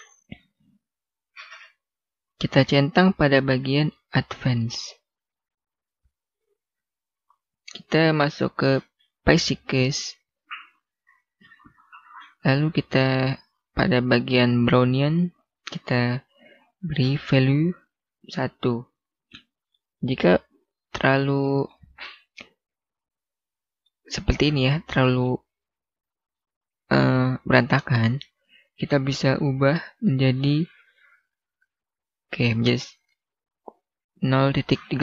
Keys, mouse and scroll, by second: 2.1 click, 4.7 scroll down 1, 15.3 click, 17.3 1, 18.2 Return, 19.3 scroll down 1, 19.6 middle click, 21.3 scroll up 1, 21.4 scroll down 1, 21.6 scroll up 1, 21.9 middle click, 24.0-24.5 scroll down 1, 24.5 middle click, 25.2 scroll up 1, 26.3 middle click, 28.6 click, 29.3 0, 31.6 Return, 32.4 scroll down 1, 32.7 middle click.